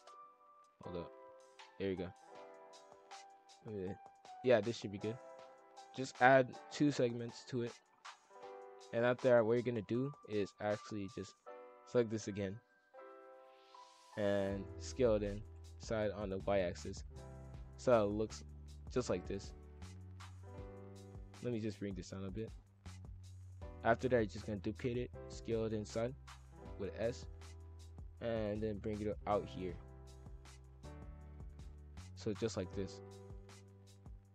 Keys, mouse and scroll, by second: 0.2 ctrl+z, 0.5 ctrl+b, 3.2 click, 3.6-5.5 middle drag, 5.5-7.0 drag, 7.0-7.5 middle drag, 7.5 KP_5, 8.0 scroll down 1, 8.4-8.7 scroll up 2, 8.7-9.2 shift+middle drag, 9.2-9.5 scroll down 1, 9.5 z, 10.5 click, 10.9 b, 11.9 click, 12.2 z, 13.0-14.8 middle drag, 14.8 s, 15.6 s, 17.2-18.8 middle drag, 18.8 s, 20.2-21.6 middle drag, 21.6 click, 22.7 scroll up 1, 22.7-24.0 middle drag, 24.0 shift+d, 24.6 KP_5, 24.7 KP_1, 25.2 s, 27.2 scroll up 1, 27.3-28.2 middle drag, 28.2 drag, 29.3 scroll up 1, 29.3 middle click, 29.7-30.5 scroll down 2, 30.5 drag, 31.9 middle click, 32.2-32.7 scroll down 1, 32.7 e, 34.2-34.3 middle drag.